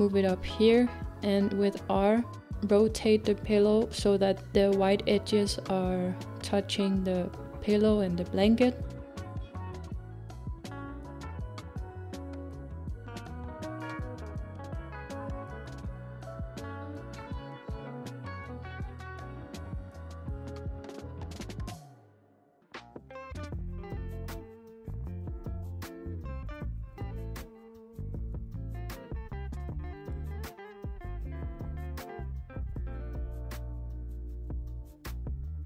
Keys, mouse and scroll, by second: 1.7 g, 2.4 r, 15.8 g, 16.0 g, 17.0-19.1 scroll down 2, 19.1 KP_7, 25.6 click, 26.8-28.8 scroll down 4, 28.8-30.4 scroll down 1, 30.4-30.7 scroll down 1, 30.7-35.6 middle drag.